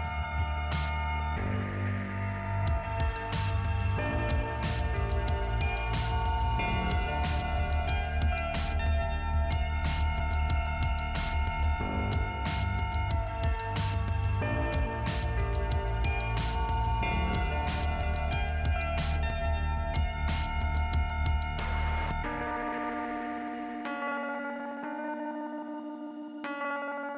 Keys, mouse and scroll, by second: 0.1 click, 3.3 click, 5.2 click, 6.3 click, 13.6 click, 13.7 click, 19.5-19.9 scroll down 1, 23.1 click, 25.3-25.7 scroll up 1, 25.7 click, 26.8 click, 26.8 click.